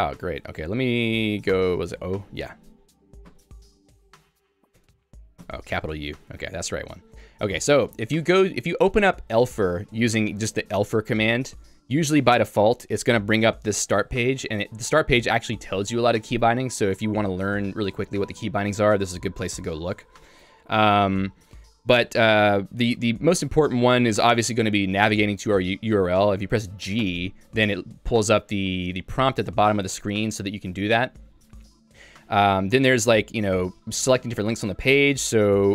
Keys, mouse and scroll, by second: 1.5 0, 3.4 o, 4.8 Escape, 5.4 shift+u, 6.9 Down, 7.7 Down, 13.1 Return, 14.2 click, 14.9 Escape, 15.2 Escape, 17.0 Escape, 20.1 j, 21.7 k, 27.1 g, 31.6 Escape.